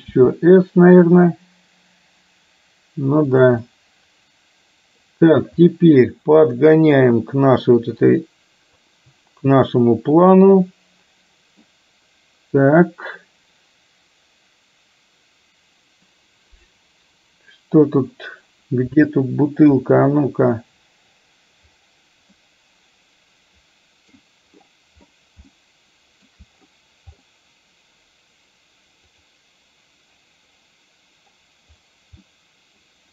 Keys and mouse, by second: 0.2 s, 3.7-5.1 middle drag, 6.6-8.9 drag, 9.7-11.7 middle drag, 19.8 KP_1, 22.4-24.3 middle drag, 25.7 shift+middle click, 29.2 click, 32.4 middle click.